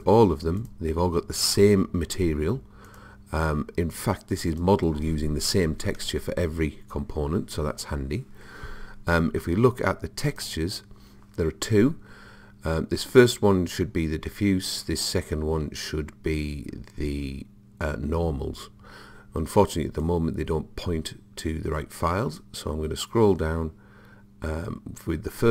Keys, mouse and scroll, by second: 2.5 click, 2.9 click, 10.3 click, 20.1 click, 22.1-25.5 middle drag.